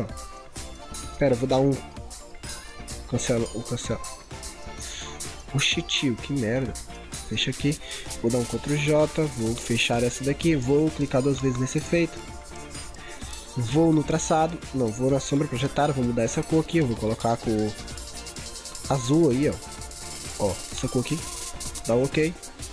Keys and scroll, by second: 8.6 ctrl+j.